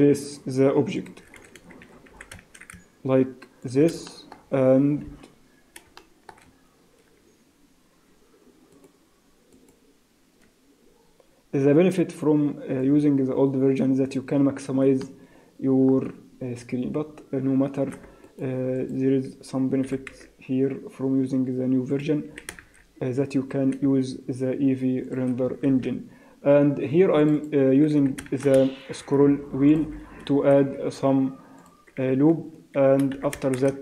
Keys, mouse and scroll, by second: 1.4 a, 1.5 a, 1.9 a, 2.1 s, 4.1 shift+middle click, 4.5-4.9 scroll up 2, 5.1 KP_Decimal, 6.0 shift+middle click, 6.4 scroll up 5, 8.7 right click, 9.5 right click, 12.8 click, 14.2-14.9 scroll down 2, 15.0 shift+middle click, 18.2 alt+right click, 18.8 alt+click, 19.9 e, 22.3 s, 25.7 ctrl+r, 28.0 s, 31.6 alt+click, 32.0 s, 33.2 s.